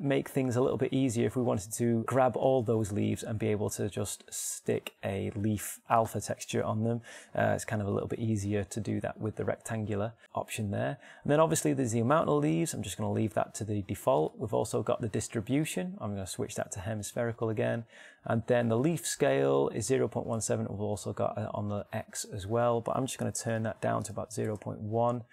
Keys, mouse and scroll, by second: 17.2-22.9 middle drag.